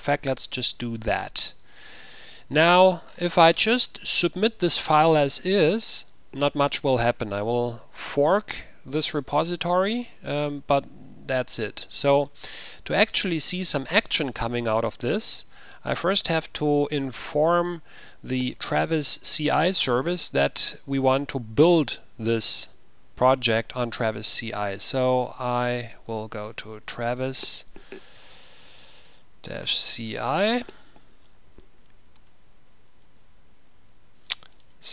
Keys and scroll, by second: 25.5 ctrl+a, 26.4-31.4 typing.